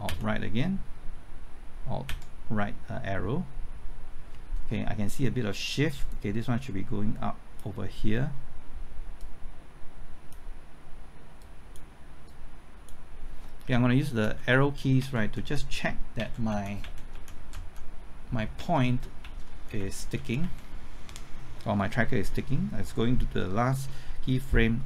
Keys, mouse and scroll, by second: 0.0 alt+Right, 2.0 alt+Right, 6.0-11.1 drag, 14.2 Left, 14.9 Right, 15.3-16.8 typing, 17.1 Left, 17.3 Right, 17.5 Left, 18.3-20.1 typing, 20.4 Right.